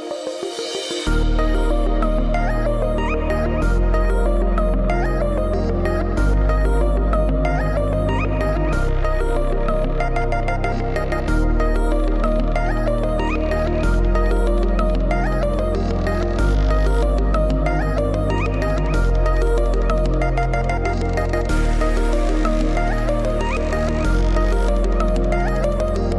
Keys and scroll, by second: 1.6 Tab, 2.6 u, 4.8 Tab.